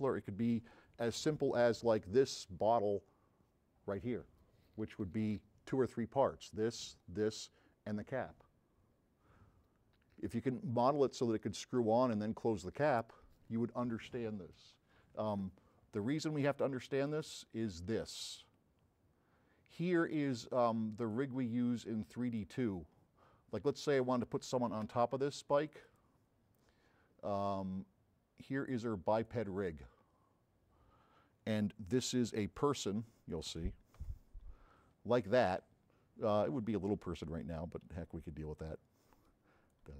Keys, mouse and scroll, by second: 16.5 click, 21.0 click, 22.3 click, 23.7 click, 25.8 drag, 29.1 click, 34.3 f, 34.8 scroll up 2, 38.6-39.9 drag.